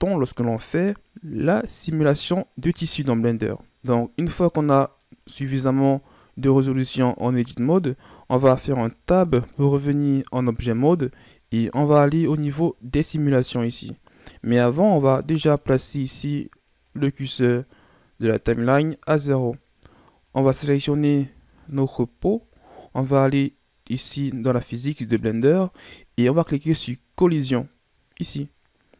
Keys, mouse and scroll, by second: 5.0-8.0 middle drag, 8.4 Tab, 9.8-12.9 middle drag, 14.3-16.8 middle drag, 16.8-19.8 drag, 20.2 right click, 21.3 scroll down 3, 21.6-24.3 middle drag, 24.3 click, 28.1-28.9 drag.